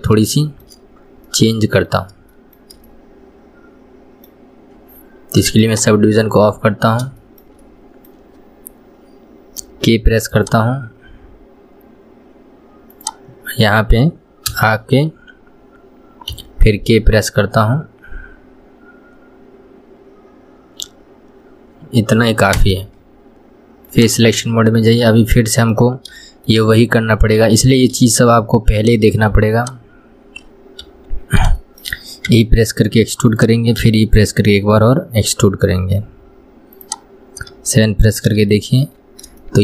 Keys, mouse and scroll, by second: 0.1 click, 0.7 shift+middle click, 1.1-1.6 scroll up 2, 1.6-6.0 middle drag, 6.0 click, 6.7-9.9 middle drag, 9.9 k, 16.7 k, 24.2-25.2 drag, 25.2-28.3 middle drag, 28.3 scroll up 2, 29.1 click, 29.9 shift+click, 31.2 KP_1, 31.9-32.6 shift+middle drag, 32.6 e, 38.4-38.9 scroll down 2, 38.9 shift+middle click, 39.4 scroll up 1.